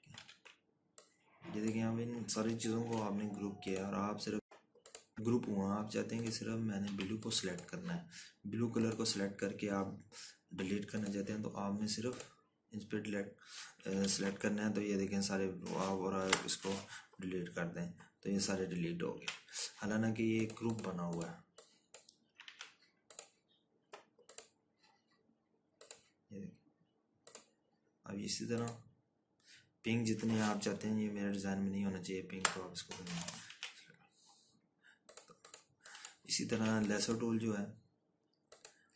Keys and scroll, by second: 1.3 ctrl+-, 3.9 ctrl+g, 8.2 z, 15.3 ctrl+-, 15.4 ctrl+-, 17.6 Delete, 20.6 ctrl+z, 23.9 ctrl+z, 33.7 Delete, 34.9 ctrl+z, 37.9 z.